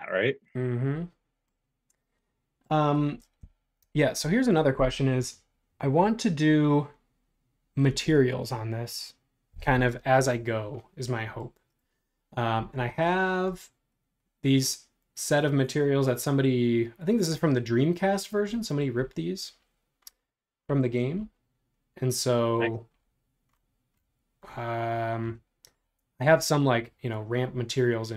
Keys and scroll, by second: 12.5 super+Tab.